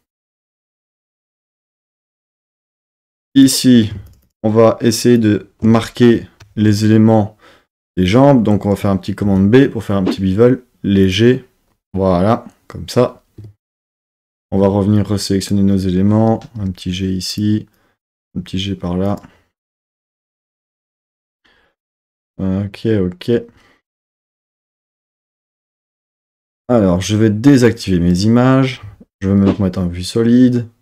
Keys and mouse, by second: 0.5 click, 2.7 Tab, 3.0 Tab, 3.3 click, 4.1 alt+shift+click, 5.2 alt+shift+click, 9.3 super+b, 11.1 click, 13.4 Tab, 13.9 Tab, 14.5 1, 15.0 click, 16.6 g, 17.3 click, 17.8 click, 18.3 g, 19.1 click, 27.7 click, 28.9 z.